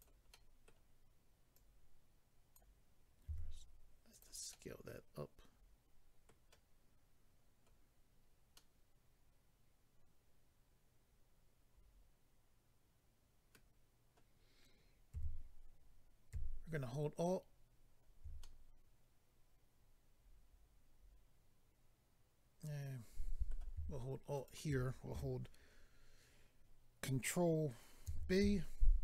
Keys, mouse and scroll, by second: 0.0 click, 0.3 middle click, 1.5 click, 3.2 s, 4.1 click, 4.2 click, 4.5 middle click, 8.5 middle click, 15.1 a, 18.4 middle click, 24.3 alt+click, 28.0 ctrl+b.